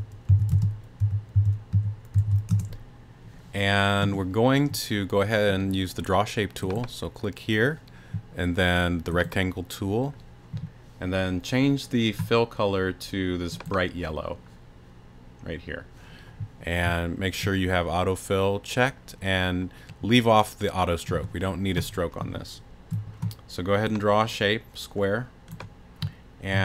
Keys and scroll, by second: 0.0-2.7 typing, 26.5 a.